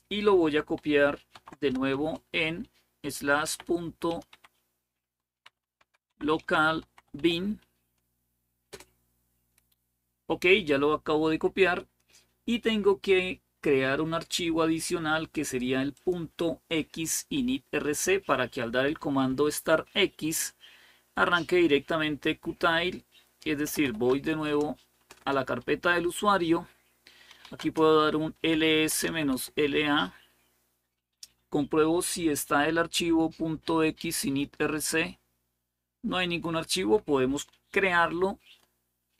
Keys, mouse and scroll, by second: 0.9-1.7 typing, 3.2-9.0 typing, 12.6-13.3 scroll down 1, 13.3-14.3 scroll down 1, 15.7 click, 23.2-24.2 typing, 24.3 Return, 24.8 Return, 25.0 Return, 26.8-29.2 typing.